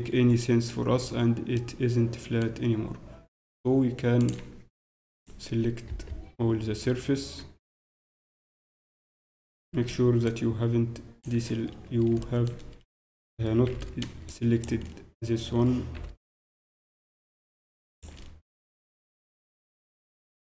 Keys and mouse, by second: 0.8 z, 1.0-3.3 middle drag, 4.2-6.0 drag, 5.1-6.8 right drag, 5.9 ctrl+KP_Add, 6.8 click, 7.8 KP_Decimal, 8.0 z, 9.5 b, 11.9-14.8 middle drag, 14.8 click, 16.3 b, 18.5-20.4 middle drag, 18.6 z, 19.9 KP_Divide.